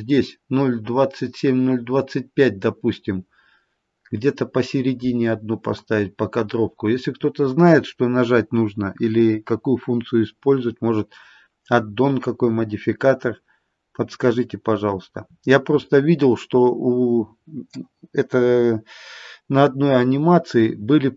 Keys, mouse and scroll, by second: 2.6-6.1 scroll down 3, 6.5-7.3 scroll down 4, 11.7-12.4 scroll down 2, 12.8-13.7 scroll down 6, 13.9-14.8 scroll down 2, 14.8-15.2 scroll down 2, 16.3-17.0 scroll up 10.